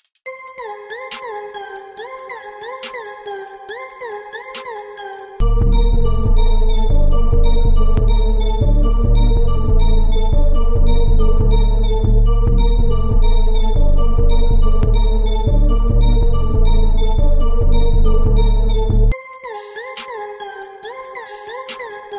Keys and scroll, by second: 1.8 ctrl+e, 2.2 ctrl+z, 3.0 ctrl+e.